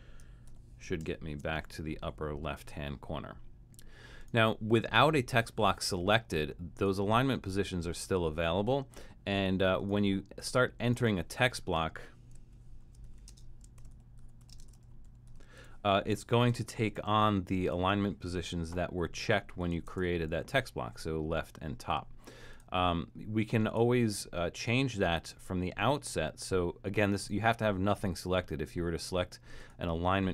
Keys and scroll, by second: 0.5 shift+super+[, 1.0 shift+super+\, 12.6-16.5 typing, 19.9 shift+Return.